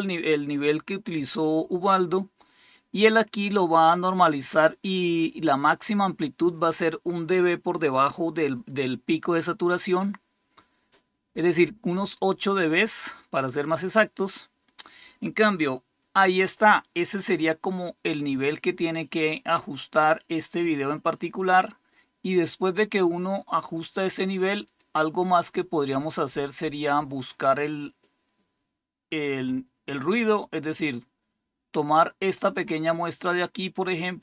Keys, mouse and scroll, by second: 9.7 click, 24.2 click, 24.6 click, 25.3 click, 30.3 click, 31.8-34.2 drag.